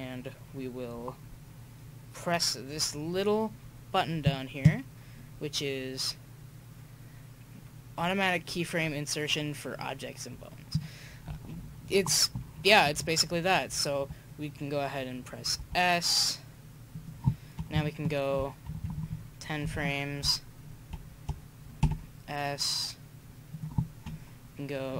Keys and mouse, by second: 4.2-6.5 drag, 10.7-12.6 drag, 15.6 s, 17.7 Right, 18.2 Right, 18.4 Right, 18.4 Right, 18.7 Right, 18.9 Right, 19.1 Right, 19.6 Left, 21.8 s.